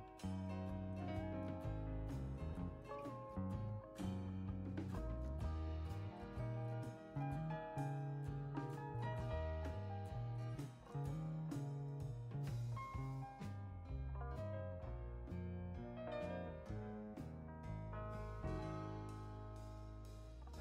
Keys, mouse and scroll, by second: 4.2 click, 8.6 click, 11.3 click, 12.6 space, 14.5 click, 15.7 click.